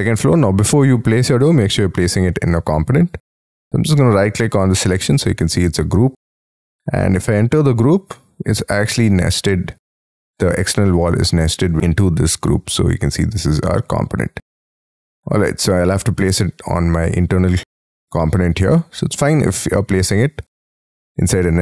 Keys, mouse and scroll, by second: 0.4 scroll down 7, 0.8 middle click, 2.6-3.1 scroll up 7, 3.1 right click, 7.1 double click, 8.9 scroll down 3, 9.4-10.4 scroll up 4, 10.8 double click, 12.4 right click, 14.2 scroll down 4, 14.7 middle click, 16.6-17.7 scroll up 16, 17.9 middle click, 19.9 scroll down 2, 20.9-21.6 scroll up 4.